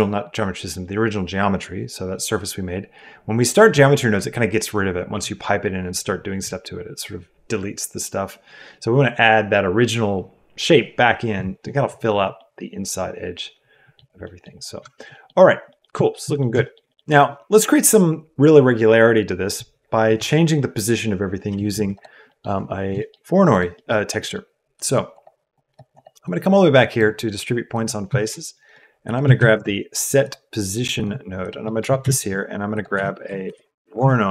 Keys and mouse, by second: 12.3 middle click, 12.4-12.9 drag, 12.9-13.9 middle drag, 14.2 drag, 14.8 shift+click, 15.1 click, 15.6 click, 15.9 shift+middle click, 16.2 middle click, 16.6 shift+middle click, 16.8 middle click, 21.9 click, 22.3 click, 23.0 shift+click, 23.8 click, 24.7 click, 25.5 click, 25.9 click, 26.2 click, 27.6 click, 28.2 shift+a, 31.3 click, 31.7 click, 31.9 shift+a.